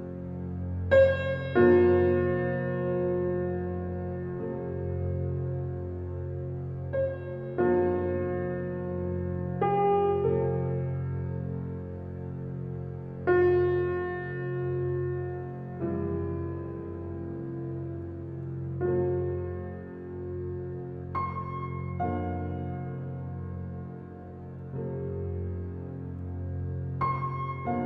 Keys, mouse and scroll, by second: 0.2 Tab, 0.8 click, 2.2 click, 3.2 click, 5.0 click, 5.2 scroll down 1, 5.7 scroll down 3, 8.0 drag, 9.0-10.4 drag, 10.4 scroll down 3, 10.8-11.9 middle drag, 11.9-12.4 scroll up 7, 12.6 click, 13.6 click, 14.0 click, 15.9 click, 16.1 click, 16.7-17.9 drag, 17.9 Tab, 18.1 click, 19.1-20.3 drag, 20.3 scroll down 1, 20.6 click, 24.8 click, 25.3 Tab, 26.3 scroll down 6, 27.4 click.